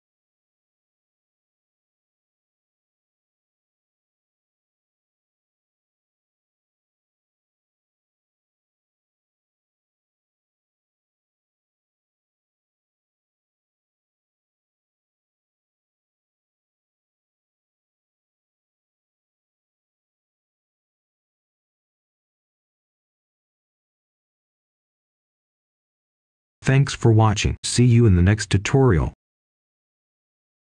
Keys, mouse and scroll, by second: 2.8 click, 3.4-3.7 scroll down 1, 3.7-4.0 scroll up 1, 4.0 right click, 4.5 scroll down 1, 5.1-7.0 ctrl+shift+drag, 9.2 right click, 10.9-11.9 scroll up 1, 11.9-12.4 scroll down 1, 12.4 right click, 14.0-17.0 drag, 18.0-24.0 right drag, 24.1-24.9 scroll down 1, 24.9 right click, 25.7-26.1 scroll down 1, 26.1-26.5 scroll up 1, 26.5 right click.